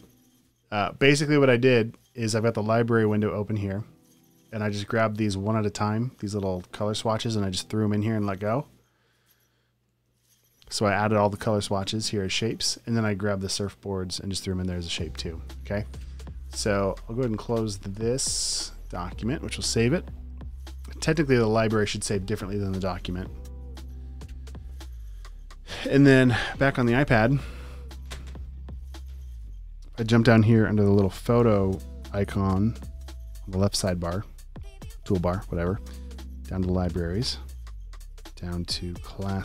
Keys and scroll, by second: 10.1 super+z.